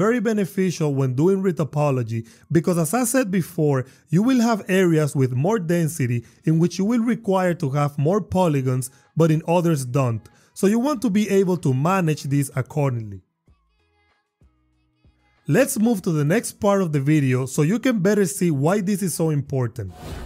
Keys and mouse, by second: 0.6 y, 1.4 click, 2.8 click, 5.3 shift+Tab, 6.3 shift+click, 6.8 shift+click, 10.0 click.